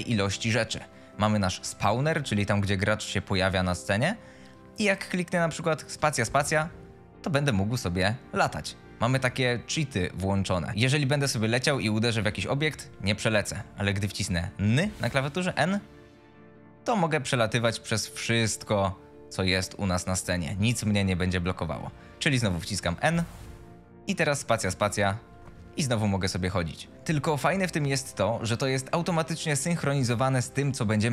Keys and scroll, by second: 3.1 w, 4.7 d, 12.3 s, 12.8 w, 13.5 s, 14.6 n, 15.7 w, 21.8-24.2 typing, 26.1 d, 28.1 a.